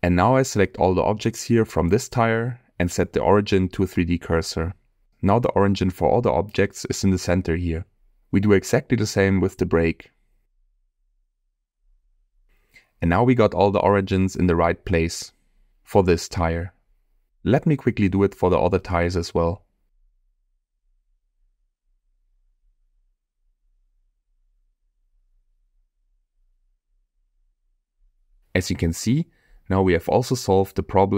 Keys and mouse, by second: 2.4-4.8 right drag, 5.5-6.4 middle drag, 6.9 click, 8.3 click, 9.1 shift+click, 11.0-13.0 right drag, 14.8 click, 15.5 click, 17.0-17.4 middle drag, 19.9 middle click, 20.1 middle click, 20.2 click, 20.2 right drag, 20.5 shift+s, 21.0 right click, 21.4 click, 21.5 shift+click, 21.6 right drag, 21.8 right click, 22.7 middle click, 23.4 click, 23.5 right drag, 23.8 shift+s, 24.3 right drag, 25.0-25.3 right drag, 25.5 click, 25.6 middle click, 25.9 click, 26.2 shift+s, 26.4 shift+middle click, 26.9 click, 27.1-27.4 right drag, 27.8 right click, 28.1-31.1 drag.